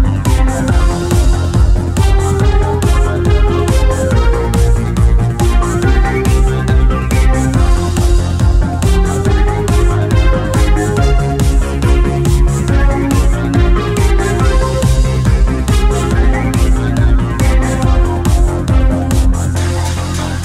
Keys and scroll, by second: 4.0 ctrl+BackSpace, 8.1 w, 8.2 space, 9.1 -.